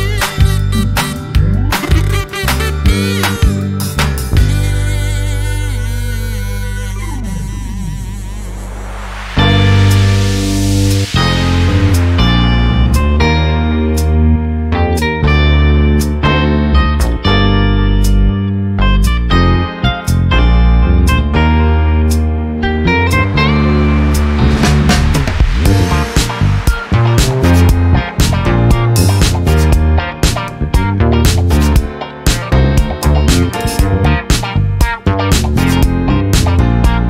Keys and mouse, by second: 1.2 f, 10.6 ctrl+shift+click, 12.4-17.0 typing, 32.2 ctrl+z, 33.1 ctrl+z, 34.1 ctrl+z, 35.9 ctrl+z.